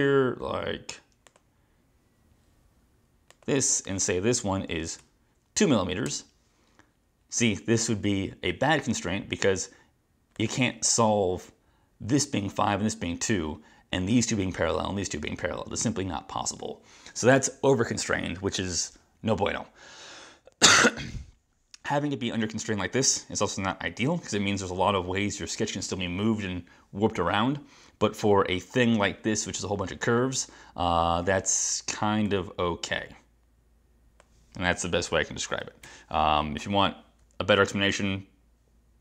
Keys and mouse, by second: 1.3 click, 3.4 click, 5.0 2, 6.1 Return, 10.4 click, 35.9 BackSpace.